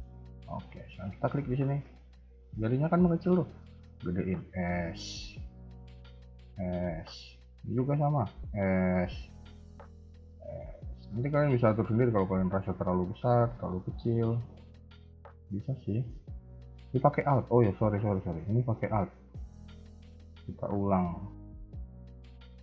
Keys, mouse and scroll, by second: 0.5 a, 0.7 a, 1.3 alt+click, 2.1-2.7 scroll down 2, 3.4 s, 5.6 alt+click, 6.0 s, 7.5 alt+click, 7.9 s, 9.6 alt+click, 10.0 s, 11.5 alt+click, 12.0 s, 13.6 alt+click, 14.0 s, 16.3 a, 16.4 a, 21.2 ctrl+z, 21.7 ctrl+z, 22.0 ctrl+z.